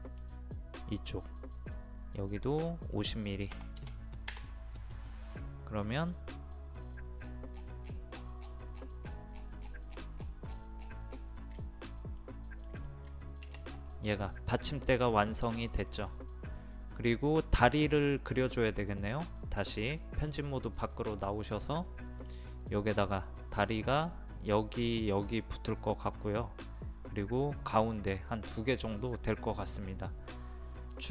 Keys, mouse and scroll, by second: 1.6 click, 3.5 KP_5, 3.8 KP_0, 5.4 middle click, 5.9-7.2 scroll down 1, 7.6-7.9 scroll down 1, 8.2 scroll down 1, 9.1 scroll up 1, 9.3-9.6 scroll down 1, 9.7 scroll up 1, 9.9 scroll down 1, 10.0 scroll up 1, 10.2 scroll down 1, 11.6 shift+middle click, 12.9 shift+middle click, 13.7 scroll up 1, 15.4-17.0 middle drag, 18.6 click, 21.7-23.0 middle drag, 29.0-31.1 scroll up 1.